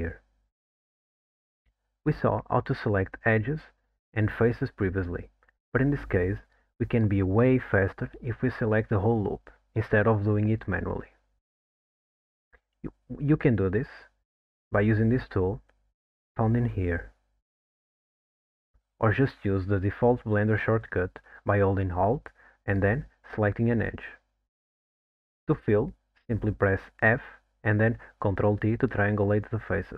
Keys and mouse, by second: 0.2 alt+middle click, 1.9-3.0 middle drag, 4.2 click, 5.4 shift+click, 7.3 shift+click, 8.2 shift+click, 10.6 click, 16.7-19.0 drag, 24.2 alt+click, 27.2 f, 28.8 ctrl+t.